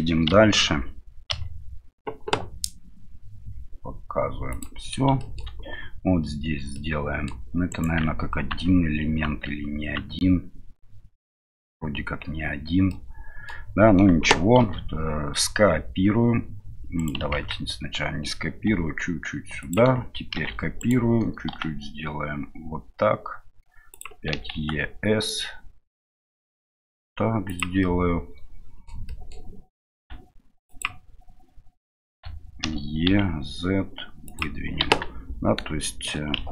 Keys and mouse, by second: 4.5 click, 5.2 shift+middle click, 7.0 middle click, 9.2 Tab, 12.9 middle click, 14.6 shift+d, 17.3 ctrl+z, 18.7 s, 20.3 shift+d, 21.5 s, 27.9-28.9 middle drag, 29.2 middle click, 34.2 e, 35.9 middle click.